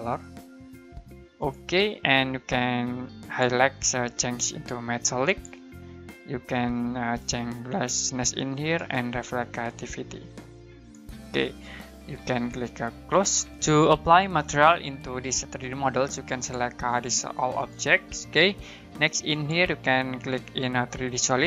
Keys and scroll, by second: 13.4 Escape.